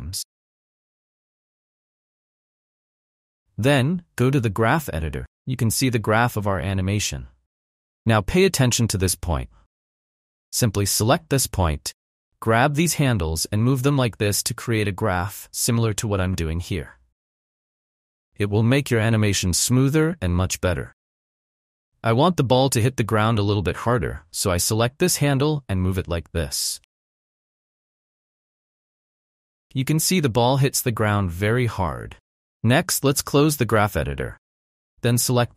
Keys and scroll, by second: 5.7 space, 21.4 space, 26.9 space, 32.8 space.